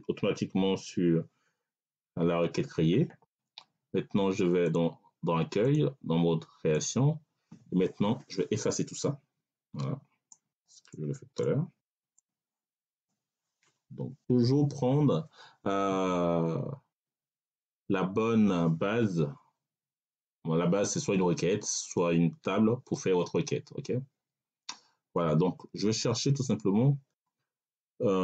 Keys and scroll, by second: 14.0 Delete.